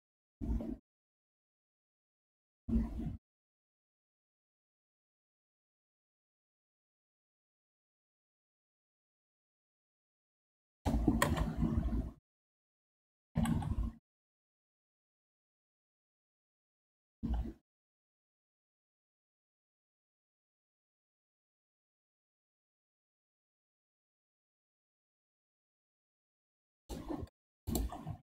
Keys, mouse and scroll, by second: 11.6 KP_1, 13.3 g, 27.7 alt+click.